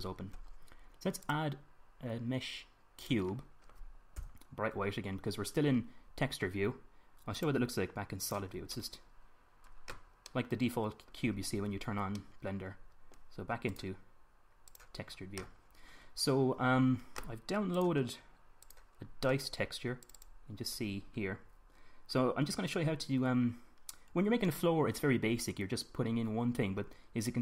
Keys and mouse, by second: 1.9-3.7 drag, 4.7 KP_1, 8.2 click, 9.8-14.2 middle drag, 14.9 middle click, 16.8 middle click, 17.1 middle click, 19.3-27.4 middle drag.